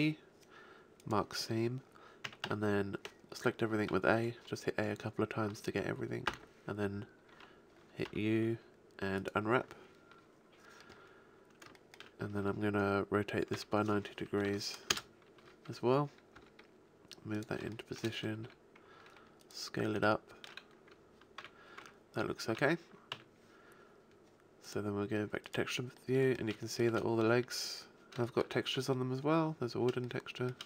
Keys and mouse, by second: 2.2 a, 2.4 a, 6.2 u, 8.0 u, 13.5 r, 16.4 g, 18.4 s, 21.6 a, 21.8 Tab, 22.4 a, 23.1 z, 24.6-25.4 drag, 26.0 drag, 26.2-26.6 shift+middle drag.